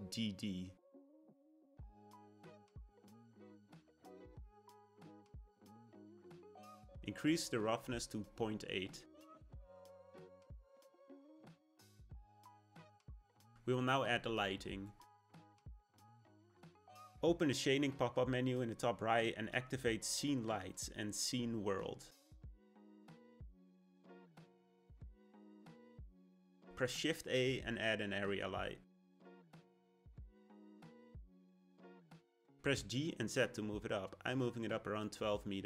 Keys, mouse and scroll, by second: 2.9 d, 7.6-10.6 drag, 11.7 click, 17.5-20.6 drag, 26.8 shift+a, 32.1 g.